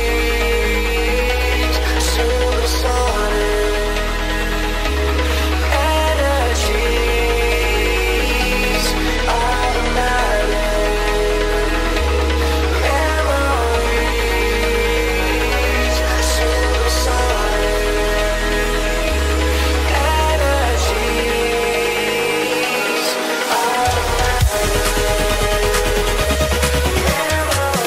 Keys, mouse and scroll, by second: 3.1-4.3 scroll down 5, 8.9-9.6 scroll down 1, 12.0-13.4 scroll down 1, 13.4-14.9 scroll down 8, 16.6 Return.